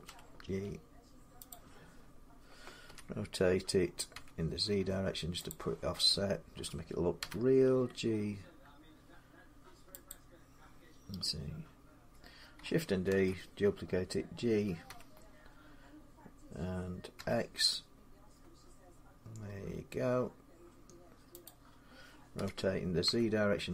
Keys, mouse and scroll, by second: 1.3-4.1 drag, 2.6 r, 3.9 z, 5.3 click, 7.0 g, 9.9 click, 12.9 shift+d, 14.6-17.9 drag, 14.6 g, 16.9 x, 21.2-23.7 drag, 22.1-22.8 typing.